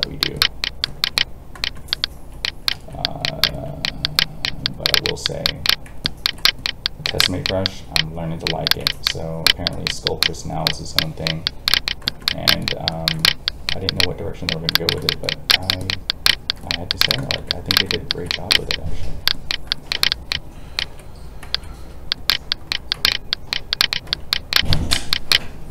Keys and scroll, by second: 2.7 alt+a, 21.4 alt+a.